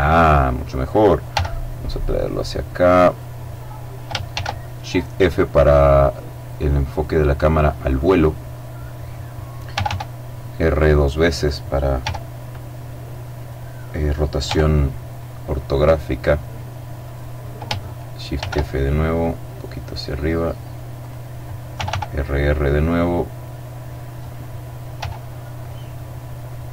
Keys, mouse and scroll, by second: 0.8 g, 2.6 click, 3.8 shift+f, 4.6-5.5 scroll down 2, 7.5 click, 8.0 middle click, 9.3 r, 10.9 click, 11.5 g, 12.9 click, 14.0 g, 16.6 click, 17.9 shift+f, 18.3-18.9 shift+scroll down 3, 20.6 click, 21.3 r, 23.7 click, 24.5 g.